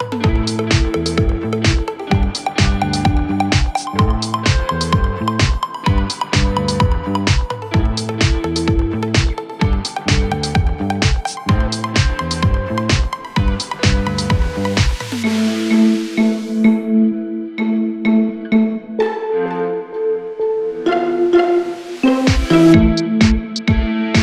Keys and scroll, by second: 23.6 space.